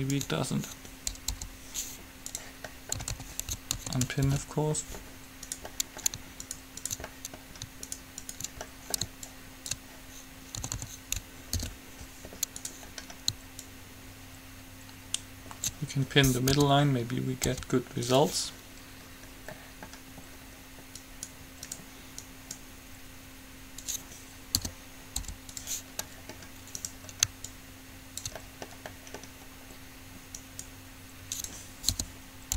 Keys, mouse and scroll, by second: 1.6 u, 3.2 a, 3.4 a, 4.1 a, 4.6 alt+p, 5.7 right click, 5.9-7.9 middle drag, 9.4-10.9 drag, 9.4 right click, 10.9 a, 11.1 a, 11.8 alt+p, 12.8 right click, 13.1-15.6 drag, 13.8 right click, 16.8 p, 17.6 u, 19.5-21.2 middle drag, 21.2 right click, 21.9 click, 22.6-24.2 right drag, 24.8 p, 25.4 u, 26.3 middle click, 27.1-28.8 right drag, 27.6-29.5 drag, 28.6-31.3 middle drag, 30.6-32.4 right drag, 32.1 p.